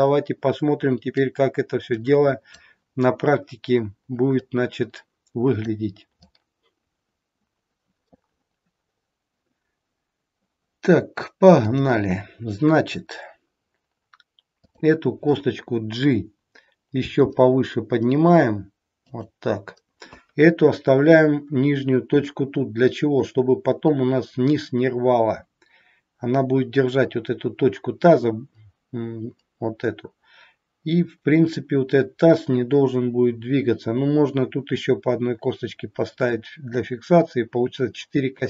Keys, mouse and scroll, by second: 1.1 click, 3.7-4.2 scroll down 1, 4.4 click, 6.2 click, 11.6 click, 13.3-14.6 scroll up 2, 14.6 click, 17.0 g.